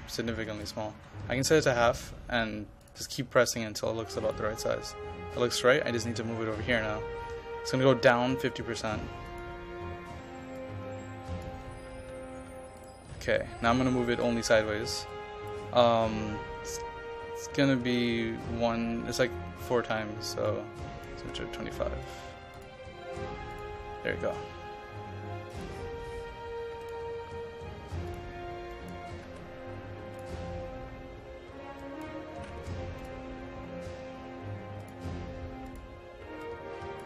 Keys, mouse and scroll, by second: 0.8-2.1 typing, 1.5 click, 2.9-12.2 drag, 12.2 KP_5, 12.8 click, 14.4 KP_0, 15.2-21.2 drag, 21.2 KP_2, 21.3 KP_5, 22.1-26.7 drag, 29.0 KP_0, 29.3 KP_Decimal, 29.5 KP_5, 30.2 click, 32.1 KP_0, 32.5 KP_Decimal, 32.5 KP_5, 33.1-37.0 drag.